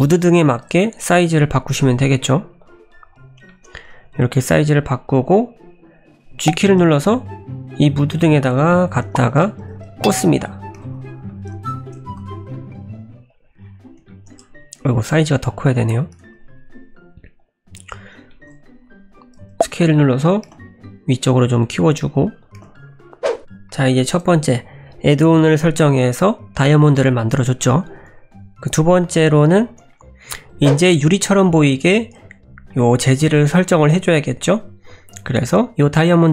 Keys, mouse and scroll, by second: 0.5 s, 1.5 `, 2.1 s, 2.8-3.5 scroll up 6, 3.5 shift+middle click, 3.9 s, 4.5 s, 6.5 g, 9.2 shift+middle click, 9.6 g, 10.4-10.8 scroll up 7, 10.8 g, 11.6 shift+scroll down 2, 11.6 shift+middle click, 12.1 g, 13.6-14.1 scroll down 8, 14.1 shift+middle click, 15.0 s, 16.1 g, 17.8-18.3 scroll up 2, 18.3 shift+middle click, 19.1 s, 20.5 g, 21.4-22.6 scroll up 3, 21.8 s, 22.6 g, 23.4 middle click, 23.7 shift+middle click.